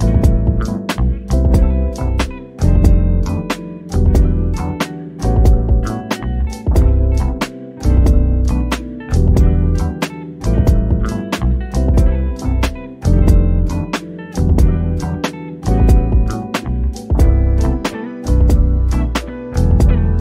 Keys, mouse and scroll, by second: 2.0 o, 2.4-3.7 drag, 3.7 scroll up 1, 5.1 Escape, 6.2 ctrl+t, 7.7 click, 12.3 scroll down 1, 13.2 o, 13.6 click, 14.3 middle click, 15.3 scroll up 1, 15.5 click, 16.4 Escape, 17.5 ctrl+d, 18.6 click.